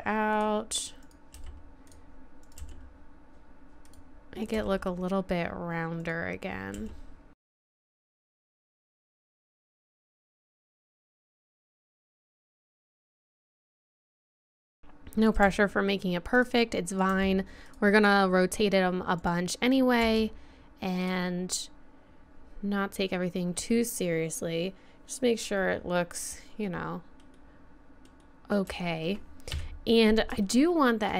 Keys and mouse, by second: 1.0 right click, 1.4 g, 2.6 g, 4.5 g, 6.7-12.4 typing, 9.8 click, 10.4 click, 10.6 middle click, 11.1 right click, 13.8 g, 14.1 g, 14.7 g, 15.5 g, 17.1 g, 19.2 click, 20.0 g, 26.2 middle click, 26.5 middle click, 27.6 middle click, 28.2 middle click, 29.1 middle click, 29.5 KP_3.